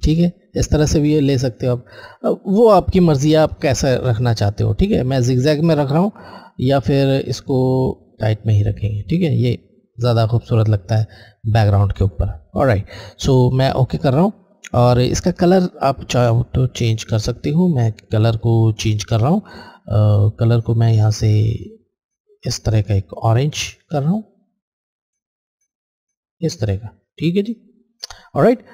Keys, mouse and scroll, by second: 1.5 click, 1.6 alt+Left, 7.0 alt+Left, 7.0 click, 13.4 alt+click, 16.5 alt+click, 20.2 alt+click.